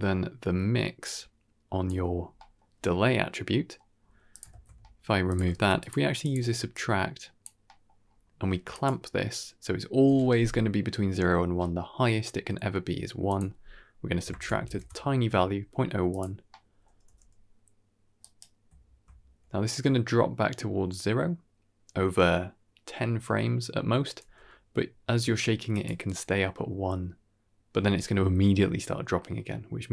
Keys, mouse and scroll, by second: 0.9 click, 2.1-2.4 scroll down 2, 2.3 middle click, 3.4 middle click, 3.8-4.2 scroll up 2, 4.2 click, 4.4 ctrl+x, 4.7 middle click, 5.2 click, 5.4 shift+d, 6.1 click, 6.6 click, 7.5 middle click, 7.9-8.7 scroll up 4, 8.6 click, 13.1-14.7 drag, 16.0 click, 16.4-16.7 middle drag, 16.9 g, 24.1 g.